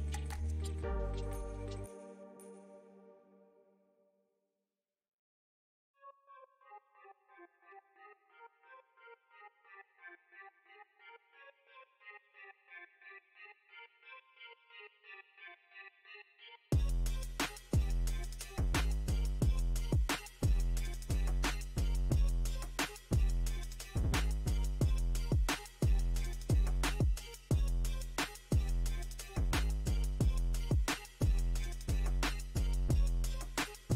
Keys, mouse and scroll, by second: 1.2 f, 1.9-3.2 ctrl+drag, 3.2 middle click, 3.7 ctrl+click, 4.0 middle click, 4.7-6.4 ctrl+drag, 6.4-7.7 middle drag, 7.7-9.0 ctrl+drag, 9.0 middle click, 9.4 ctrl+click, 10.0 middle click, 10.5-12.2 ctrl+drag, 12.2 middle click, 12.6 ctrl+click, 13.5 middle click, 14.0 ctrl+click, 14.9 middle click, 15.3 ctrl+click, 16.2 middle click, 16.6 ctrl+click, 17.4 middle click, 18.2 space, 18.7-20.2 drag, 20.2 f, 20.9-22.0 drag, 22.0 middle click, 22.4-23.9 ctrl+drag, 23.9 ctrl+middle click, 24.3 ctrl+click, 25.0 middle click, 25.4-26.4 ctrl+drag, 26.4 middle click, 27.3-30.3 drag, 32.9 ctrl+click, 33.7 middle click.